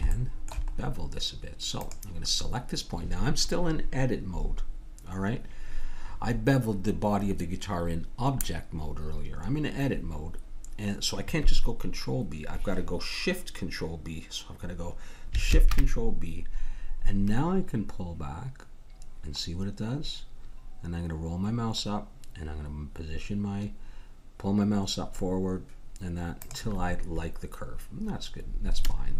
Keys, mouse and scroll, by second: 0.7 middle click, 1.8-3.5 drag, 6.2-8.5 middle drag, 9.7 middle click, 10.4-12.4 middle drag, 15.5 ctrl+shift+b, 28.8-29.1 middle drag.